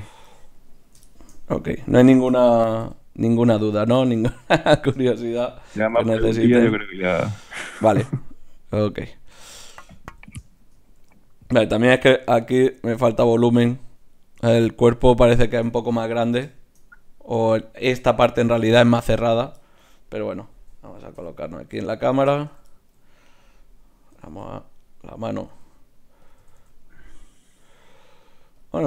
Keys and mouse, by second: 1.8 click, 2.1 right click, 2.6 g, 5.8 g, 9.5 g, 10.1 KP_1, 11.0 g, 13.1 g, 20.3 right click, 21.2 KP_0, 24.2 r, 25.5 r, 26.4 r.